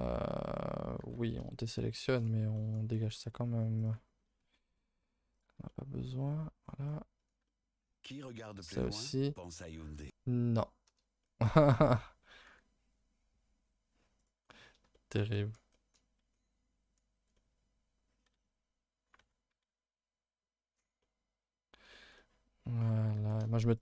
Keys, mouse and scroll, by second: 1.0 alt+h, 1.4 middle click, 1.7-2.5 scroll up 3, 2.1 shift+middle click, 2.5 middle click, 3.1-3.8 scroll up 2, 3.8 alt+shift+click, 4.0-4.7 scroll up 2, 4.7 alt+shift+click, 5.0 alt+click, 5.3 alt+click, 5.7-8.4 middle drag, 8.4 alt+shift+click, 11.2 shift+middle click, 11.4-11.9 scroll up 2, 11.9 middle click, 12.5 g, 14.4 middle click, 15.2 scroll up 1, 15.4 middle click, 16.0-16.3 scroll up 1, 16.3-18.2 middle drag, 18.2 s, 19.6 s, 21.0-23.1 middle drag, 23.1 g.